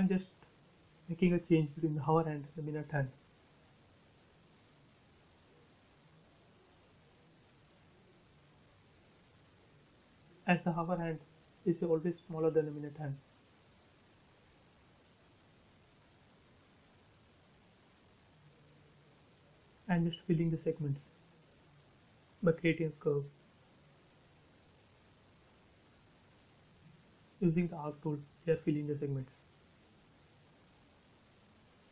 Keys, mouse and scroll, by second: 3.5 click, 3.6 space, 4.3 scroll up 1, 5.1 a, 5.6 click, 8.6 space, 12.2 click, 14.4 f, 15.8 click, 16.8 space, 17.3 scroll up 1, 21.1 a, 21.9 click, 23.4 space, 24.2 a, 24.6 click, 27.8 click, 28.0 space, 28.3 scroll down 1, 29.7 e, 29.9 click, 30.8 space, 31.0 click, 31.7 scroll down 1.